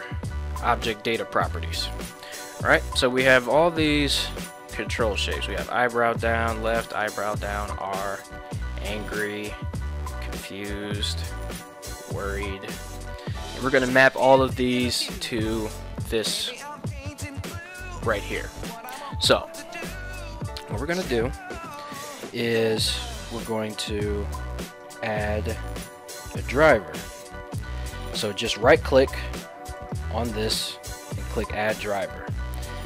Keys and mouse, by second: 3.8-5.2 drag, 6.2 click, 7.8-8.9 drag, 10.0-11.2 drag, 11.9-13.1 drag, 21.1 right click, 22.4 right click, 24.7-26.7 right drag, 29.8-32.3 right drag.